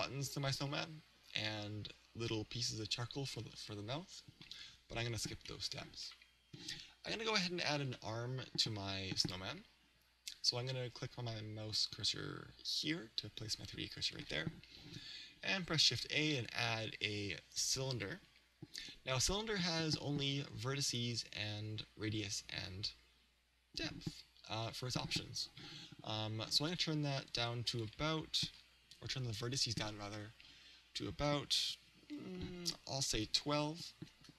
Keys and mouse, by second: 5.5-7.5 middle drag, 7.9-10.0 middle drag, 12.8 click, 15.9 shift+a, 30.5-34.1 drag.